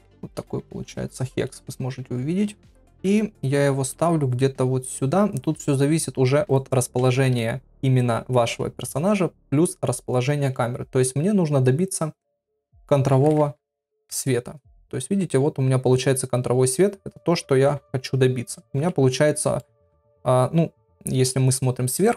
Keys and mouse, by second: 0.3 click, 3.9 KP_7, 3.9 g, 5.7 g, 12.5-14.7 drag, 13.4 KP_0, 17.7 KP_3, 18.7 KP_1, 19.6 middle click, 21.4 KP_7.